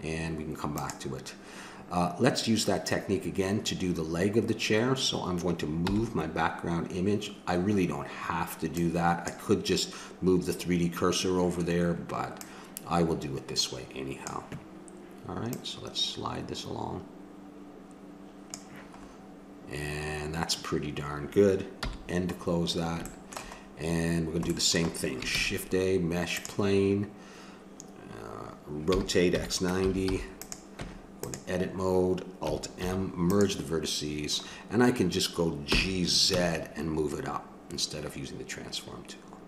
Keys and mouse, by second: 5.8 n, 8.8-12.2 drag, 12.4-14.2 drag, 14.2 middle click, 15.5-17.2 drag, 17.2 middle click, 19.0-21.8 middle drag, 21.8 n, 22.4 middle click, 25.3 shift+a, 28.9 r, 30.7 Tab, 32.8 alt+m, 35.7 g.